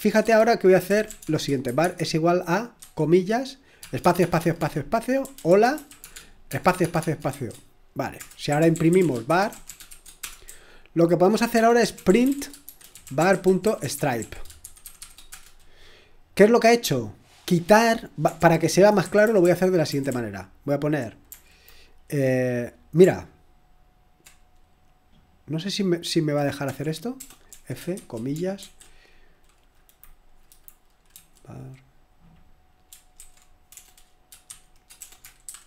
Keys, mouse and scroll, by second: 0.6-15.8 typing, 18.0 typing, 18.3 ctrl+p, 19.0 Left, 19.2 Left, 19.4 Left, 19.8-20.9 Left, 26.6-28.6 typing, 30.4 Delete, 30.8-31.6 typing, 33.1 ctrl+e, 33.7-35.6 typing.